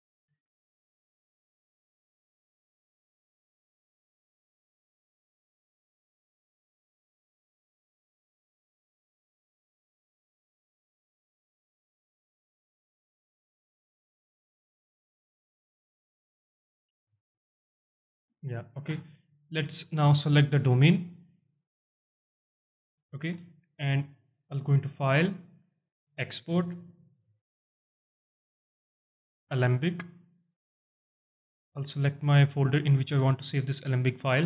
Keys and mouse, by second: 17.4 space, 18.8 shift+Left, 20.0 shift+drag, 20.6 alt+click, 22.1 click, 24.6 click, 25.1-29.7 drag.